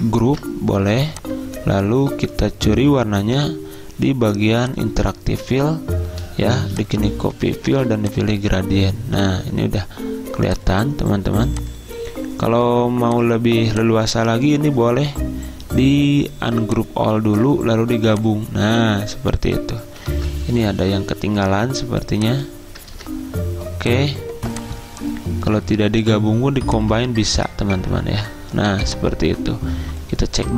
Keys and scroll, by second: 0.4 ctrl+g, 20.2 ctrl+z, 23.0 ctrl+z.